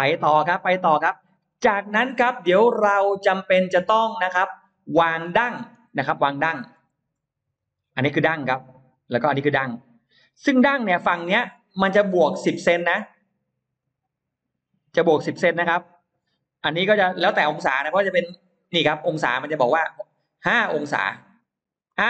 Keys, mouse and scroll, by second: 1.3-1.9 scroll down 4, 2.1-4.0 middle drag, 4.5 scroll up 1, 4.9-5.2 scroll down 1, 5.2 middle click, 5.6 scroll down 1, 6.3-6.6 scroll up 1, 6.8 shift+x, 7.4-8.9 shift+drag, 9.5-10.6 shift+drag, 11.7-12.8 shift+drag, 13.1 shift+click, 13.7 shift+click, 14.5 shift+click, 15.1 shift+click, 16.7 shift+click, 17.9-19.0 shift+drag, 19.7 shift+click, 21.3 shift+click, 21.7 shift+right click.